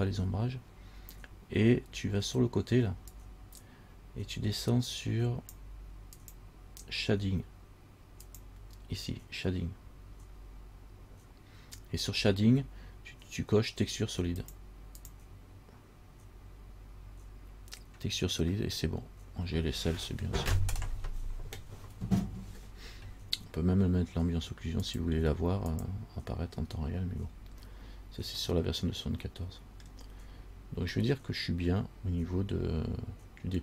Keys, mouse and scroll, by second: 3.3 click, 6.4 click, 8.5 click, 14.6 click, 15.2 click, 25.1 click, 25.9 click, 27.5-28.5 scroll down 3, 28.5 scroll down 1, 28.7 middle click, 30.4-31.1 scroll up 3, 31.2 middle click.